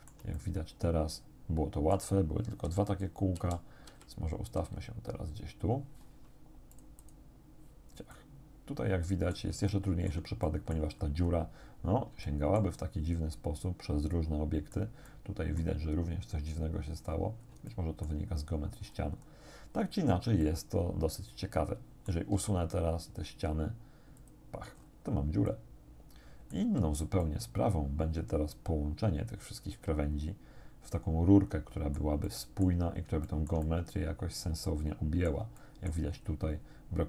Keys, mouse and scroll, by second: 0.7-2.2 drag, 2.7 1, 3.5 KP_4, 4.6 KP_4, 6.8 click, 8.2-9.6 drag, 9.7 shift+click, 10.5 shift+click, 11.0-11.5 scroll up 1, 12.3-15.0 shift+drag, 15.1 click, 17.0 middle click, 17.2-17.7 scroll up 3, 17.7 shift+click, 18.8-20.0 scroll down 2, 20.4 click, 20.6-22.3 middle drag, 22.4 x, 24.2 click, 24.8-25.4 scroll up 1, 25.5 middle click, 25.7-26.7 drag, 26.7 middle click, 26.7 z, 27.2 middle click, 27.3 click, 27.5 middle click, 28.0-32.2 drag, 32.3 click, 33.0 middle click, 33.3-35.5 shift+drag, 35.6 shift+click, 36.1-36.5 shift+scroll up 1.